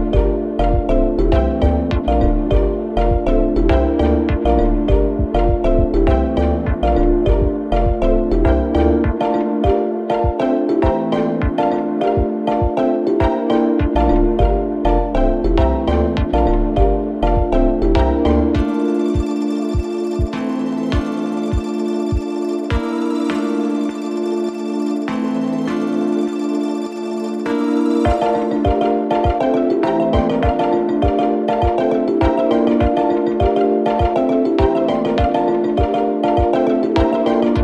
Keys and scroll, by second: 8.2 4, 8.8 3, 9.0 ], 12.3 ], 21.8 ctrl+z, 33.8 F1, 34.0 F2.